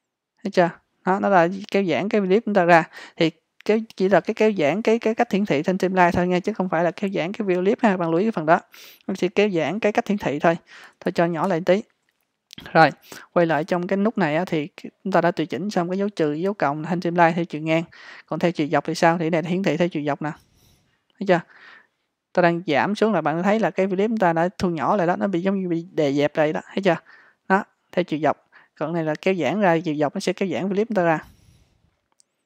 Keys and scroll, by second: 10.9 super+-.